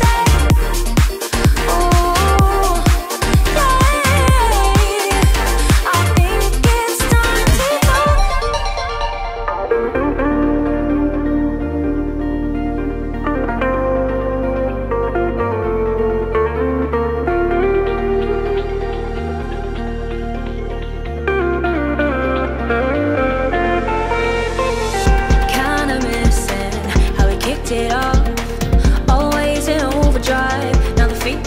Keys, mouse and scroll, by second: 1.6 ctrl+d, 3.7-4.1 scroll down 1, 4.4 ctrl+d, 5.4-5.9 scroll down 2, 6.1-8.3 drag, 8.3 ctrl+g, 9.7-20.1 drag, 20.6 ctrl+scroll up 1, 21.1 alt+scroll down 1, 22.0 alt+scroll up 1, 22.7-23.7 scroll up 2, 25.5-31.1 drag, 31.1 i.